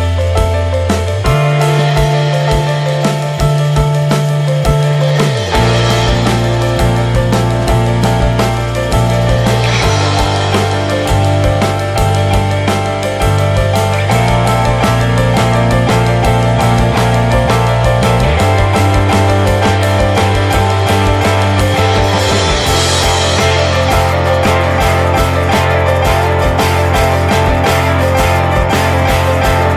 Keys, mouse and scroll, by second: 1.5 right click, 2.1-3.6 middle drag, 5.3 right click, 7.9-9.0 right drag, 9.3 middle click, 9.7-13.8 right drag, 15.4-18.1 drag, 19.0 right click, 19.4-21.0 middle drag, 21.0 right click, 21.6 middle click, 23.5-27.2 drag, 28.9 middle click.